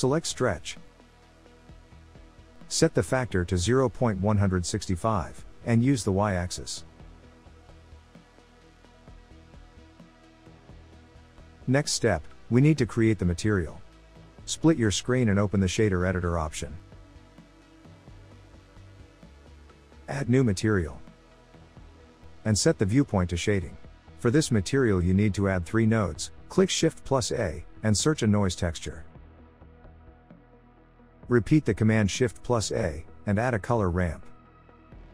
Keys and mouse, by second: 1.9-8.0 drag, 9.1 click, 12.2-14.3 drag, 14.4-15.5 drag, 17.1-19.3 drag, 21.5 middle click, 23.9 click, 26.9 shift+a, 31.6 shift+a.